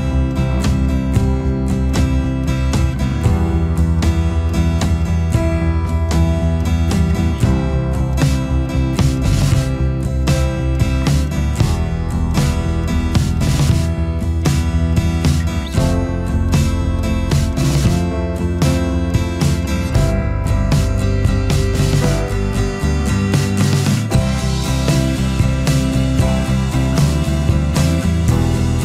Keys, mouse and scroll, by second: 0.4 alt+scroll down 1, 0.7 space, 1.5 alt+scroll up 1, 1.9 space, 7.0 space, 7.7 alt+scroll up 1, 9.3 space, 13.3 alt+scroll down 1, 13.4 space, 14.5 space, 15.6 space, 21.3 space, 25.5 space, 26.4 alt+scroll up 1, 28.4 alt+click.